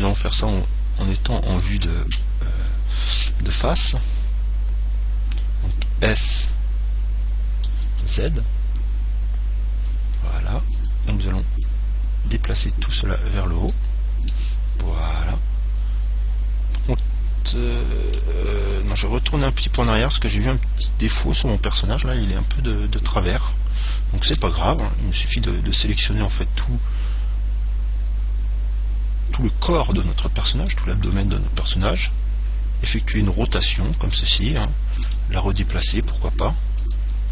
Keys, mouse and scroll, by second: 0.4 KP_1, 2.0 KP_3, 7.8 s, 11.3 click, 14.5-16.3 middle drag, 19.3 ctrl+z, 24.5 c, 30.9 right click, 32.2 r, 34.6 click, 35.2 g, 37.1 click.